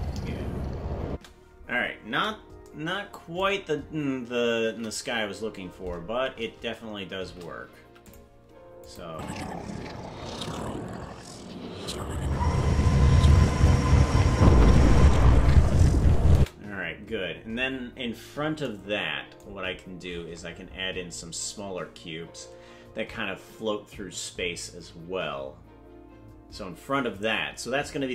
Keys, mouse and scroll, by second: 1.1 space, 5.0 shift+`, 8.8 click, 9.0 space, 16.4 space, 19.5-20.8 scroll down 21.